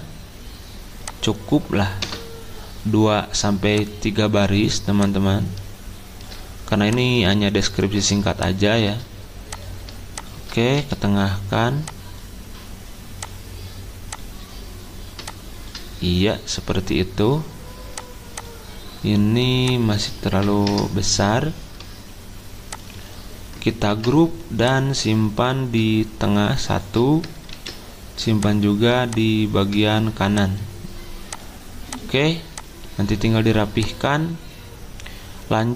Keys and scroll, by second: 2.0 BackSpace, 10.8 c, 20.3 7, 20.6 Return, 23.9 ctrl+g, 27.5 ctrl+d.